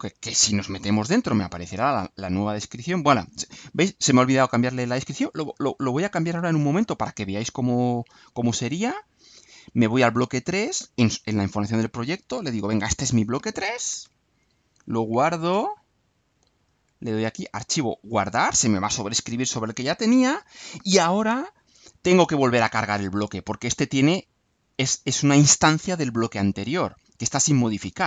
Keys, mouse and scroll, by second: 5.7 click, 10.7 click, 11.6 click, 12.7 BackSpace, 12.9 3, 13.6 ., 15.6 click, 18.1 click, 20.5 click, 23.5 click.